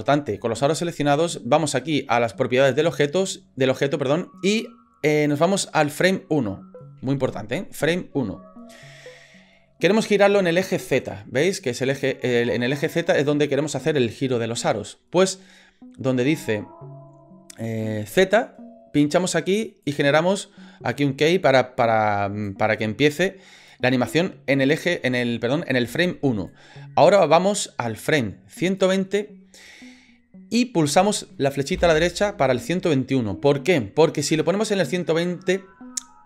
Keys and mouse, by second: 19.8 click, 22.5-23.7 drag, 26.5-28.8 drag, 31.7 Right.